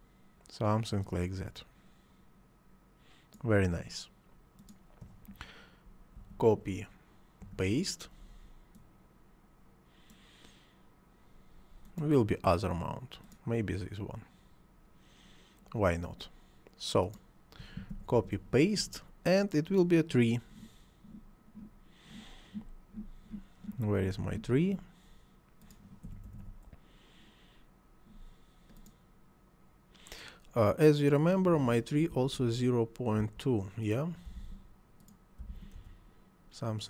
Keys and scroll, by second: 6.2 ctrl+c, 7.5 ctrl+v, 17.9 ctrl+c, 18.2 ctrl+v, 26.1 t, 26.3 r, 26.5 e, 32.2 ., 33.2 2, 34.3 ., 34.4 2, 35.4 ., 35.5 2, 35.8 Return.